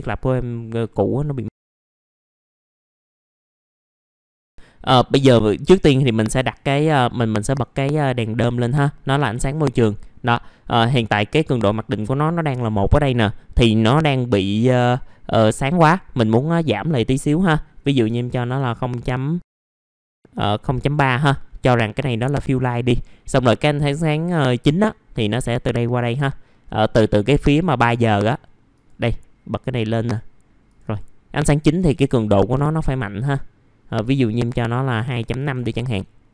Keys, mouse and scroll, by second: 19.5 KP_0, 19.7 KP_1, 20.1 KP_Decimal, 20.3 KP_1, 30.8-32.9 drag, 33.8 KP_2, 36.2 click.